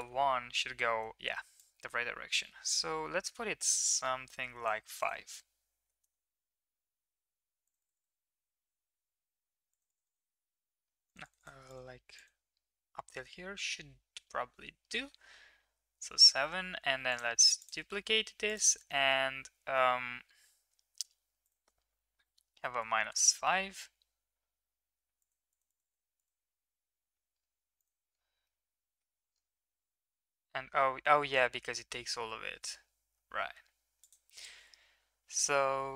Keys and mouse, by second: 1.6-4.6 shift+drag, 5.0 click, 7.6 click, 7.8 click, 7.9 click, 9.6 click, 9.9 click, 10.0 click, 11.2 click, 11.3 click, 11.6 click, 12.1 click, 17.1-17.6 drag, 18.4 click, 21.3-23.0 drag, 25.1 click, 25.4 click, 25.7 click, 25.8 click, 26.2 click, 28.4-29.0 middle drag, 33.9-35.9 drag.